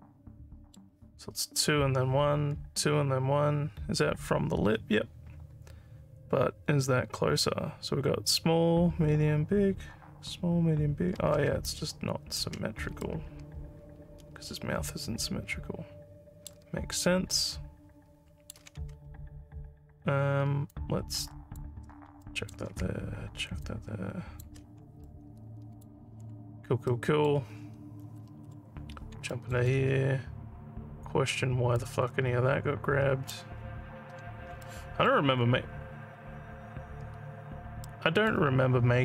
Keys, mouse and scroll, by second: 11.7 ctrl+click, 13.0-16.4 alt+middle drag, 17.3-18.4 alt+middle drag, 20.7 ctrl+click, 22.2 alt+middle click, 23.6 ctrl+click, 25.0 alt+middle click, 26.9 alt+middle click, 29.3 alt+middle click, 31.7-33.3 ctrl+drag, 34.6 alt+middle click, 35.3 alt+scroll down 2, 37.9 alt+middle click.